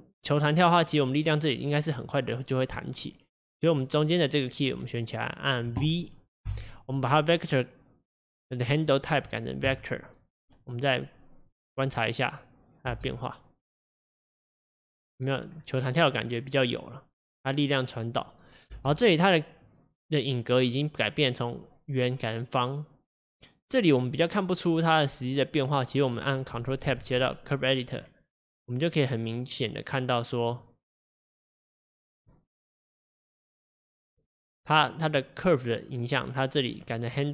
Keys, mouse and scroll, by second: 3.9-9.7 drag, 10.7 click, 12.4 click, 13.0 space, 15.6-18.8 scroll down 3, 18.8 space, 19.7-23.4 drag, 29.3-37.3 drag.